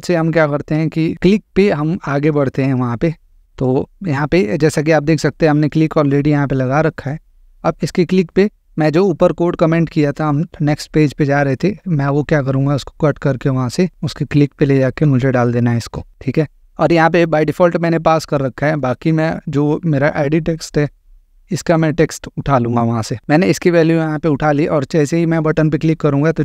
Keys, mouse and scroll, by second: 2.2 click, 2.9-3.8 scroll, 5.7 click, 8.1 BackSpace, 10.7 click, 10.8-11.4 scroll, 13.9 click, 14.8 BackSpace, 16.1-17.1 drag, 18.8 click, 20.8 click, 23.2 click.